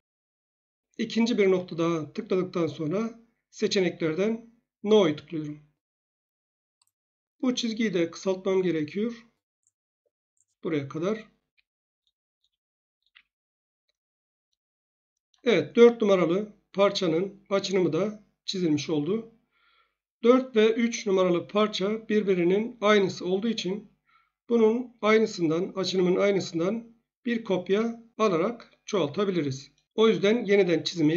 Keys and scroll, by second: 11.4 Escape, 13.0 Escape.